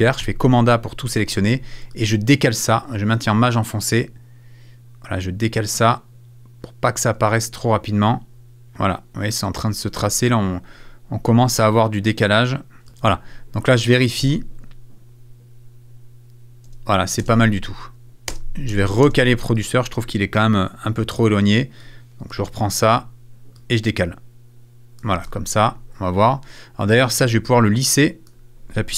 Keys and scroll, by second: 0.2 super+a, 14.2 space.